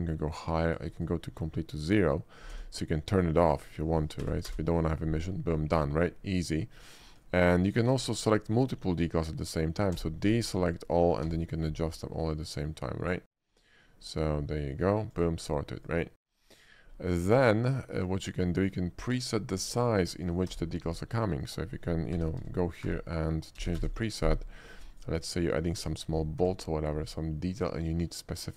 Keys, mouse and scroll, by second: 0.4 click, 0.9 click, 2.0 click, 2.7 d, 3.5 click, 4.3 0, 4.5 Return, 6.8 middle click, 7.4 shift+middle drag, 7.9 click, 10.0 d, 10.5 click, 12.0 click, 12.2 middle click, 13.0 middle click, 13.1 middle click, 13.5 middle click, 14.4 middle click, 15.1 click, 15.8 click, 16.6 shift+middle drag, 17.3-18.3 shift+middle drag, 18.6 shift+middle click, 19.3 shift+click, 19.8 shift+middle click, 20.2 shift+middle click, 20.5 d, 21.5 click, 22.1-23.7 typing, 23.8 Return, 25.0 click, 25.4 shift+middle click, 25.8 d.